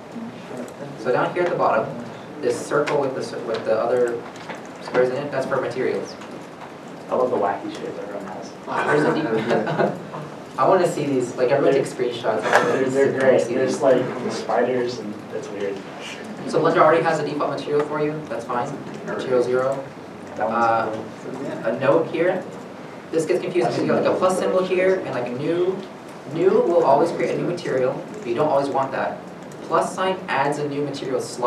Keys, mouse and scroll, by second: 1.1 shift+middle click, 1.2-1.9 scroll down 1.